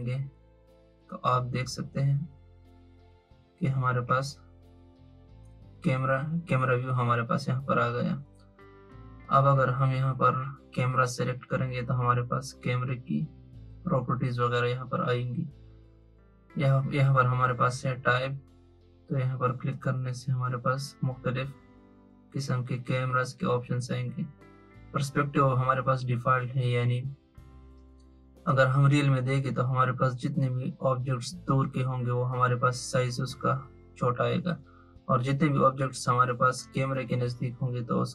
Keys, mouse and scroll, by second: 4.0-7.0 drag, 10.9 click, 19.9-23.1 drag.